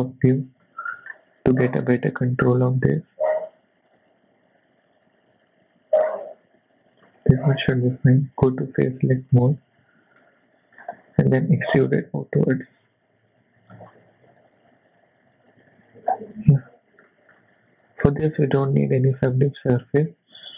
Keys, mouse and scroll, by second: 0.1 z, 0.6 shift+middle click, 1.1 scroll up 2, 2.3 g, 8.4 click, 9.3 click, 9.8 z, 10.2 middle click, 10.8-11.5 scroll down 2, 11.5 e, 15.8 Tab, 16.1-17.1 scroll down 3, 17.1 middle click, 18.6 click, 19.2 scroll down 2, 19.4 middle click.